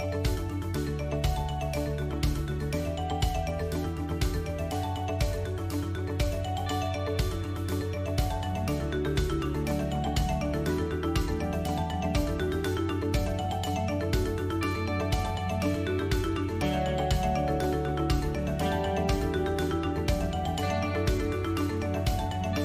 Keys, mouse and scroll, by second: 0.1 alt+shift+click, 0.9 middle click, 1.4-1.8 scroll down 3, 1.8 middle click, 2.4 right click, 3.9-4.4 scroll down 3, 4.4 shift+middle click, 5.1 KP_Decimal, 7.5 ctrl+r, 12.2 s, 17.4 alt+h, 21.6 KP_7.